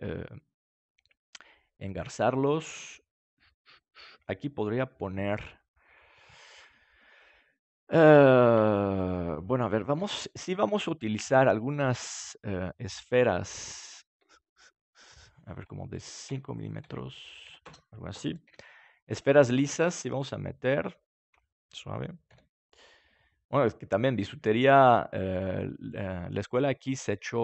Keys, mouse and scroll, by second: 0.7-2.4 middle drag, 4.2-9.0 middle drag, 9.0-11.5 right drag, 9.9 g, 10.6-14.5 drag, 14.1 s, 15.9-19.1 drag, 18.4 KP_7, 20.1-22.9 drag, 22.3 g, 23.6-25.0 drag, 23.8-25.0 right drag, 24.2 g, 25.8-27.4 drag.